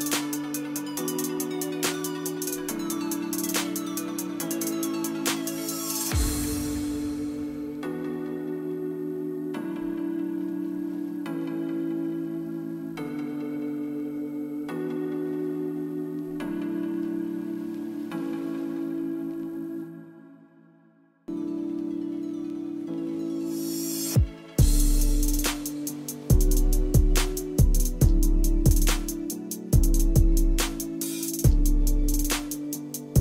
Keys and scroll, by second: 6.8 KP_2.